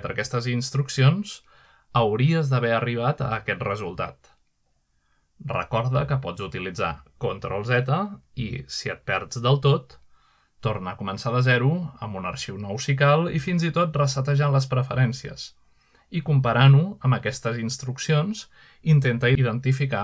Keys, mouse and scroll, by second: 1.6 middle click, 2.0 shift+middle click, 2.3-2.8 shift+scroll up 1, 2.8-3.7 scroll down 2, 3.6 shift+middle drag, 5.5-5.8 shift+middle drag, 6.6-7.0 shift+middle drag, 12.8-13.4 middle drag, 12.8 typing, 13.8-14.5 middle drag, 14.7-15.3 shift+middle drag, 15.4 shift+middle click, 19.9 typing.